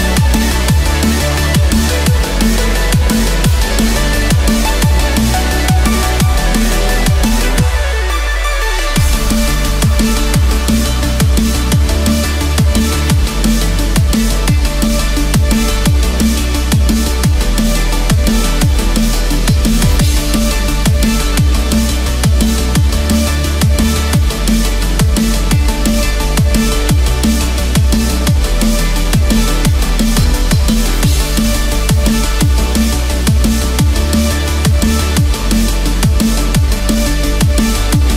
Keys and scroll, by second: 2.8 ctrl+-, 4.6 ctrl+=, 13.3 ctrl+-, 14.3 ctrl+=, 32.5 ctrl+-, 35.6 ctrl+0, 36.5 ctrl+z.